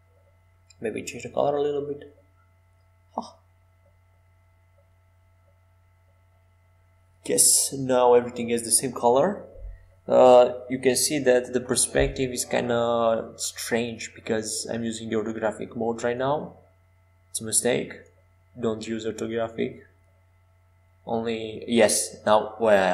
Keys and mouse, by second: 2.0-3.8 right drag, 5.4-7.6 drag, 7.6 middle click, 8.4 middle click, 13.4 ctrl+j, 15.2 ctrl+alt+shift+c, 21.7 KP_5.